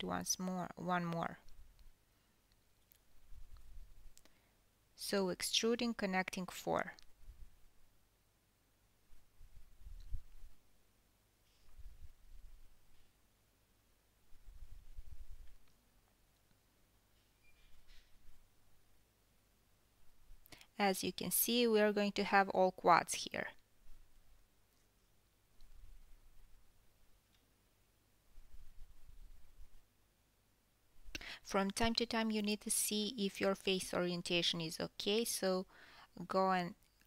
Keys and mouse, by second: 4.6 1, 6.8-7.7 drag, 8.7 e, 10.8 drag, 12.4 shift+click, 12.9 shift+click, 15.6 shift+click, 16.4 f, 17.7 1, 18.2 click, 18.9 shift+drag, 19.7 shift+click, 21.3 shift+click, 22.9 f, 25.6 shift+click, 25.9-29.6 typing, 26.3 ctrl+z, 29.0 click, 30.2-30.9 drag, 30.5-37.0 middle drag, 30.9 g.